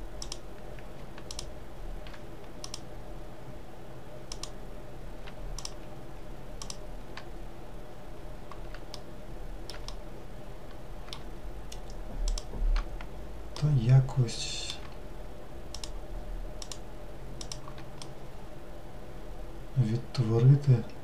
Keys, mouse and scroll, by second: 0.4 click, 4.6 click, 5.8 shift+click, 6.8 shift+click, 9.3 alt+middle click, 10.0-12.5 middle drag, 12.5 shift+click, 13.8-15.9 middle drag, 15.9 shift+click, 16.8 shift+click, 18.2-21.0 middle drag.